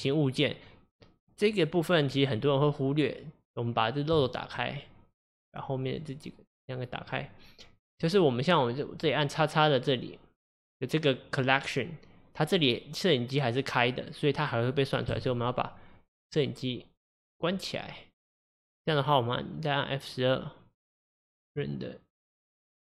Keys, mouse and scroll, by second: 4.2-7.2 drag, 9.0 click, 15.2 click, 18.4 click, 21.5-22.9 drag.